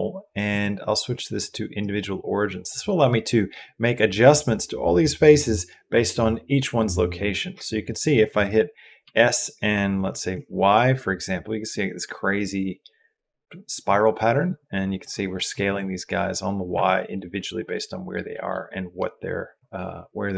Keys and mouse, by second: 0.3-1.7 drag, 2.3 middle click, 8.8 s, 17.5 middle click, 18.1 middle click.